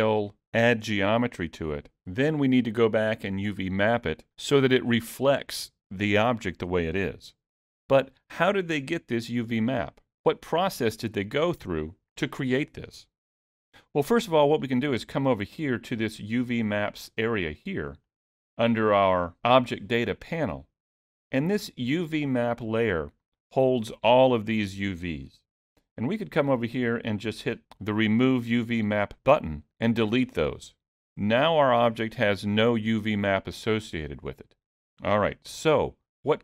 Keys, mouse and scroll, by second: 18.1 click, 29.7 click.